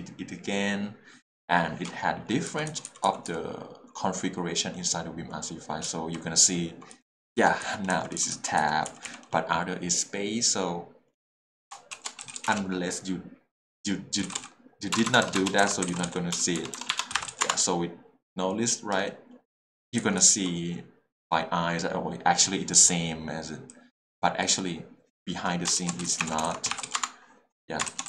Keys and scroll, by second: 2.5 j, 5.8 h, 6.9-8.9 typing, 12.2 s, 12.3 e, 12.4 t, 12.5 space, 14.2-17.3 typing, 17.5 Return, 20.0 k, 20.2 j, 26.0-26.9 typing, 27.0 Return.